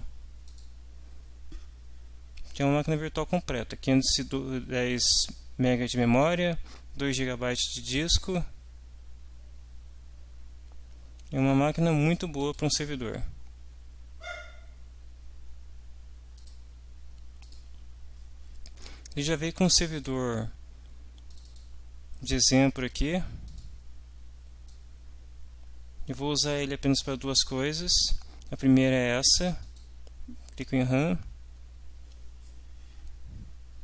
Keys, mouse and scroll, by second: 0.6 click, 12.4 click, 16.4 click, 17.4 click, 20.0 click, 21.3-21.7 drag, 22.9 click, 23.5 click, 24.7-26.7 drag, 27.8 click, 29.7 click.